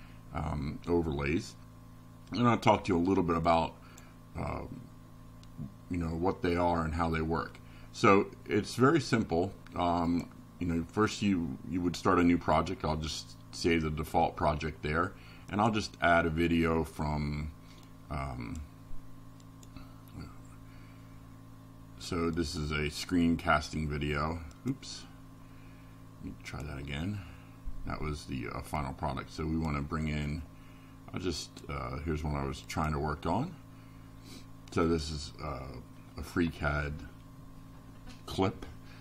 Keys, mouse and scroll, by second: 5.2 click, 7.5 click, 10.3 click, 12.4 click, 13.8 click, 16.5 click, 18.5 click, 20.3 click, 22.4 click, 24.8 click, 26.0 click, 28.0 click, 34.8 click, 36.3 click, 38.0 click.